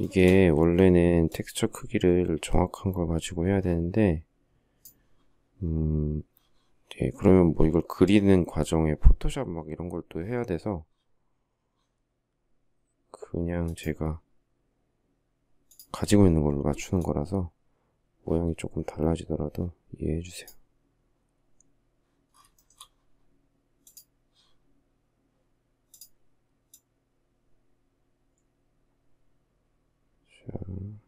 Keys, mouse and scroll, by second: 22.2 shift+middle click.